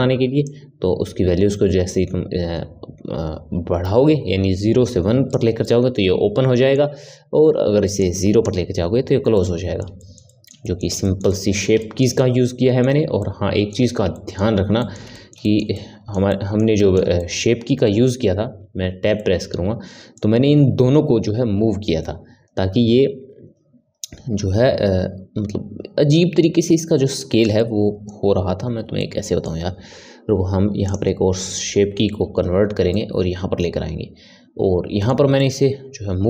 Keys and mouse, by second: 0.4-3.5 drag, 5.6-7.9 middle drag, 7.9-9.3 drag, 9.3-18.6 middle drag, 18.6 Tab, 19.1-22.2 middle drag, 27.5-28.6 middle drag, 28.6 Tab, 29.0-30.8 middle drag, 30.8-32.3 drag, 32.3 Tab, 32.9-36.2 middle drag.